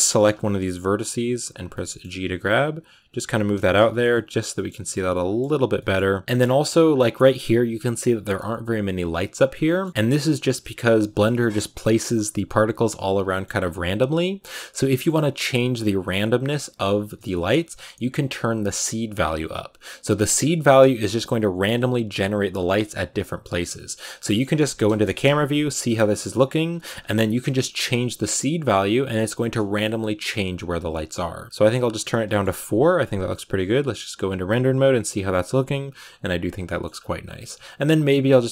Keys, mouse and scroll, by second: 0.1-0.6 scroll up 2, 0.6 g, 1.6 middle click, 2.3 right click, 2.4 g, 3.2 Tab, 3.5 shift+middle click, 3.8 z, 4.0 shift+middle click, 4.1 scroll up 2, 4.4 middle click, 4.8 z, 5.0 middle click, 5.3-5.6 scroll up 1, 5.6 middle click, 6.1 scroll down 1, 6.2 middle click, 6.3-9.5 scroll up 5, 9.5 shift+middle click, 9.9-12.3 scroll down 2, 12.3-13.1 scroll down 1, 13.1 middle click, 13.4-14.7 scroll up 1, 14.7 scroll up 1, 14.8-20.3 middle drag, 20.3-24.0 drag, 24.0 scroll down 3, 24.2 shift+middle click, 24.7 KP_0, 25.4 shift+middle click, 25.7-26.1 scroll down 4, 27.2 ctrl+b, 27.4-28.7 shift+middle drag, 28.7-31.9 drag, 31.9-32.9 scroll down 6, 32.1 shift+middle click, 32.9 z, 33.7-34.8 scroll down 4, 34.8 scroll down 1, 34.8-36.5 drag, 36.5 shift+middle click, 36.8-38.5 scroll up 1.